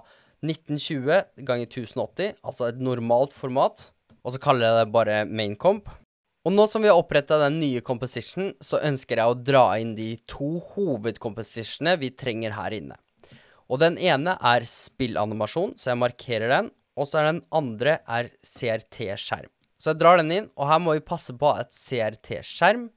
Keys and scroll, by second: 0.8-2.2 typing, 3.3-5.8 typing, 6.1 Return.